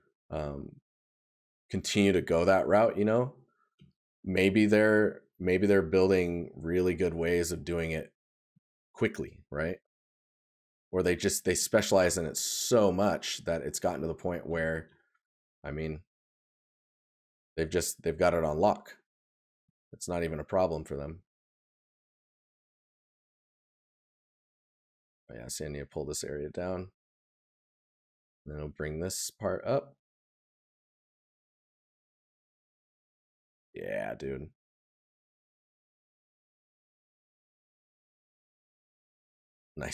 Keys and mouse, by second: 13.9 right click, 30.9 right click.